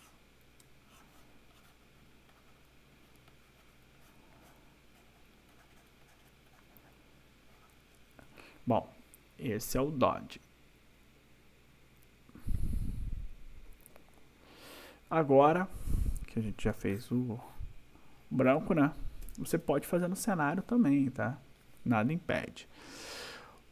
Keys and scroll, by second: 16.7 space, 19.2 ctrl+-.